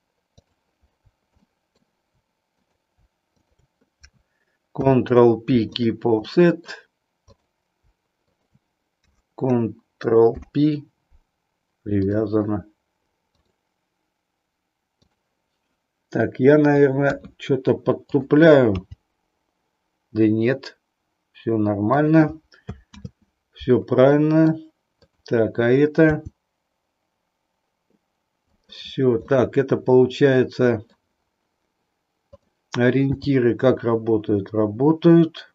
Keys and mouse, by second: 1.5 shift+middle click, 4.6 ctrl+p, 6.2 middle click, 8.2 shift+click, 10.2 ctrl+p, 13.5-15.1 drag, 17.0 KP_3, 18.0 click, 18.7 g, 22.1 click, 22.9 ctrl+z, 24.1 middle click, 25.0 click, 26.0 g, 28.6 click, 29.4-31.0 middle drag, 32.2 click, 33.1 g.